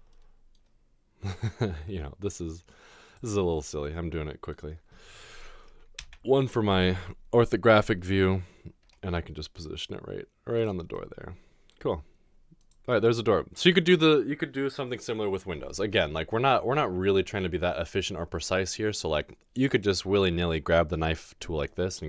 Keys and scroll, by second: 1.9 typing, 6.0 typing, 8.8 typing.